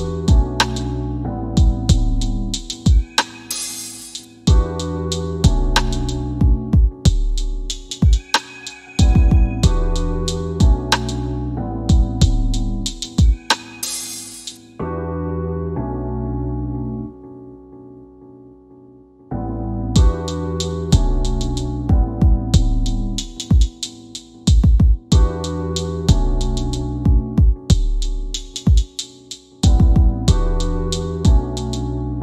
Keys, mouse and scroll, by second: 0.2 typing, 2.0 click, 5.4 KP_5, 12.2 KP_1, 12.5 KP_Enter, 14.7 click, 18.2 KP_5, 18.4 KP_Enter, 20.9 click, 24.5 scroll down 1, 25.9 middle click, 27.4 click, 28.8 m, 30.6 click, 30.6 typing.